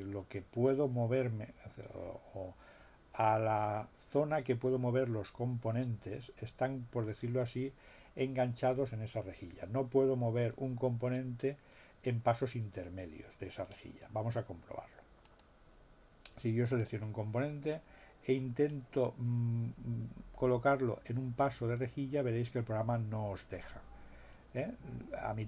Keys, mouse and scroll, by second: 15.2 click, 16.7 click, 17.7-25.4 drag.